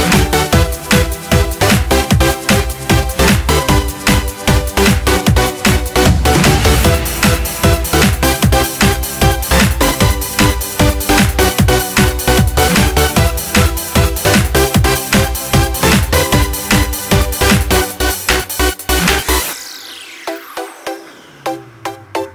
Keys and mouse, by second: 1.5-2.9 drag, 2.9 middle drag, 3.1-3.7 drag, 3.7-5.0 middle drag, 6.4 click, 6.8 middle click, 7.4 middle click, 8.0 click, 9.1-9.5 middle drag, 9.5-10.1 drag, 10.1-10.7 middle drag, 10.7-11.6 drag, 14.3 click, 17.5 n, 22.2 click.